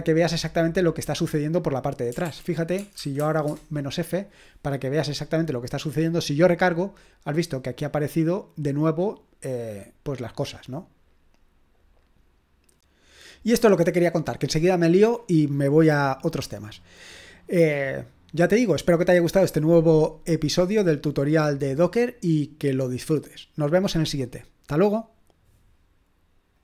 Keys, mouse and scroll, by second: 2.3 ctrl+p, 2.8-3.7 typing, 6.4 click, 7.8 click, 26.5 click.